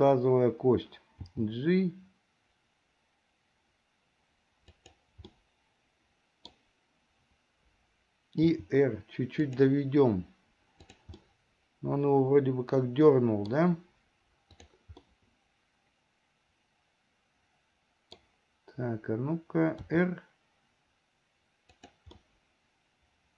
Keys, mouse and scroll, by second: 1.3 g, 5.5-6.6 middle drag, 6.6 scroll down 1, 8.6 r, 11.3-13.7 middle drag, 14.6 click, 15.1-18.4 middle drag, 19.9 r, 22.2-23.3 middle drag.